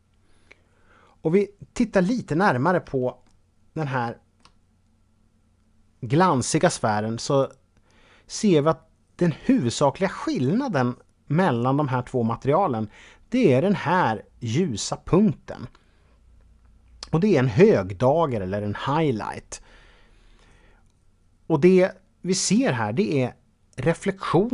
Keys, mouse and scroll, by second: 2.2-2.8 scroll up 1, 3.2-4.5 shift+middle drag, 4.7-5.7 scroll up 2.